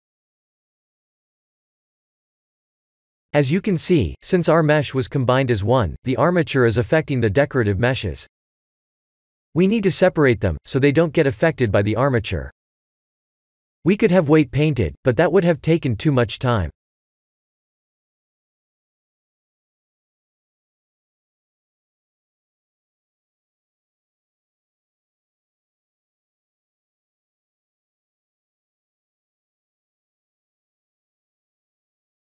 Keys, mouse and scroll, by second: 2.1 click, 2.1 click, 2.7 KP_3, 3.1 KP_1, 4.0 r, 6.5 click, 9.0 click, 10.1-11.1 scroll up 5, 11.8 click, 12.4 middle click, 13.3 click, 14.4 scroll down 1, 15.0 scroll down 3, 15.1 ctrl+s, 16.5 click, 17.1 Tab, 17.8 click, 19.5 l, 20.6 Tab, 21.9 Tab, 22.4 s, 25.8 Tab, 26.4 middle click, 27.7 ctrl+z, 28.6 ctrl+z, 29.8 middle click, 31.3 shift+click.